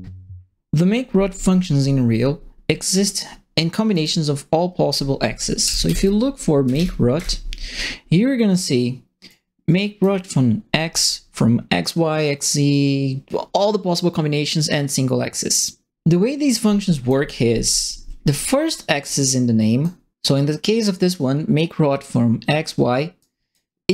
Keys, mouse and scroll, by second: 5.3-7.1 typing, 9.2 right click, 16.5 right click, 17.6 middle click, 18.5 ctrl+middle click, 18.8 ctrl+middle click, 19.2 right click, 23.2 right click.